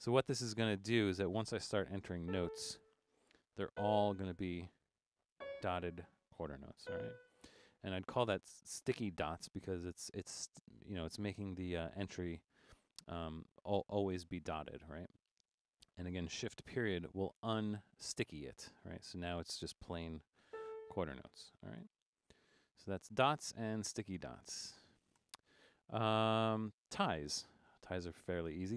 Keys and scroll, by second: 2.3 a, 3.5-4.2 typing, 5.4 c, 6.6-7.3 typing, 17.0 shift+>, 20.6 a, 21.8-25.2 typing.